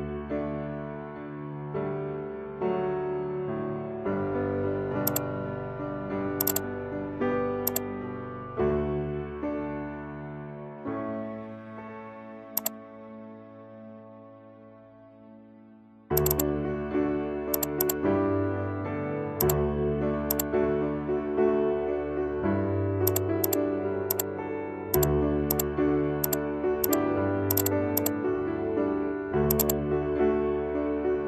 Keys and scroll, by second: 12.3 ctrl+=, 30.6 ctrl+0.